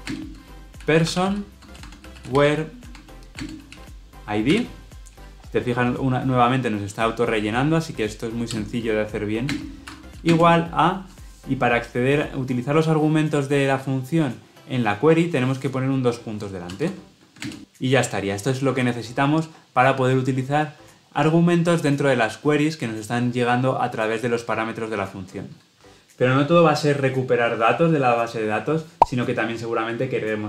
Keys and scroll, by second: 8.5 Return, 17.4 ctrl+space.